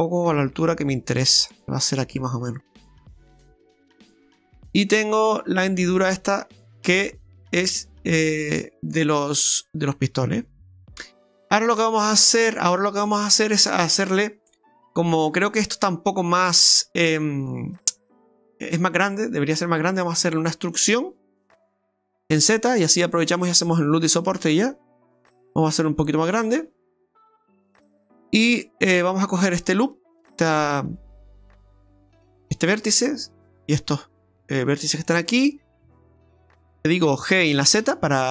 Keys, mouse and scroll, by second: 2.8-3.3 scroll down 4, 3.9 Tab, 4.5 middle click, 6.9 middle click, 10.0 middle click, 10.4 Tab, 10.7-11.2 scroll up 3, 11.3 shift+middle click, 11.7 scroll up 2, 12.1 middle click, 12.4 shift+middle click, 13.7 scroll down 1, 14.9 right click, 15.5 alt+shift+right click, 15.7 right click, 16.9 right click, 18.3 alt+shift+right click, 18.7-19.2 scroll down 3, 19.0 middle click, 20.4 middle click, 21.7 e, 26.6-27.1 scroll up 3, 27.1 middle click, 28.8 click, 31.7 right click, 32.4 right click, 33.5 click, 33.6 alt+shift+right click, 33.6 middle click, 34.5 alt+shift+right click, 37.3 g.